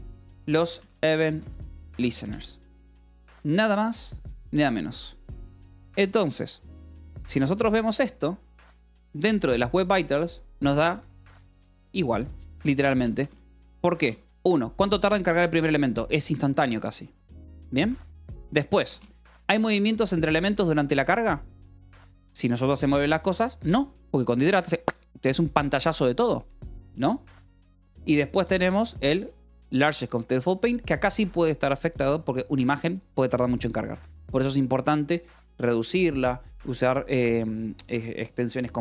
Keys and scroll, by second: 0.0-2.2 typing, 6.5 ctrl+s, 8.0 shift+v, 8.5 Escape, 9.6 k, 12.9 j, 13.5 Escape, 13.7 j, 14.4 shift+v, 15.8 Escape, 18.6 k, 19.4 shift+v, 22.4 Escape, 27.8 k, 28.8 shift+v.